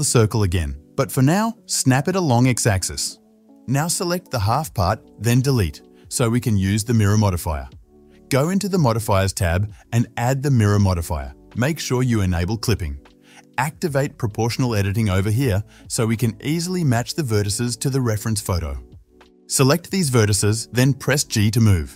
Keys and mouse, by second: 4.6 ctrl+click, 4.6-8.1 ctrl+middle drag, 5.0 ctrl+z, 6.0 x, 8.1 click, 8.2-9.0 middle drag, 9.0-11.8 drag, 11.8-15.4 middle drag, 13.4 1, 15.6 click, 18.9-20.2 middle drag, 20.2 g.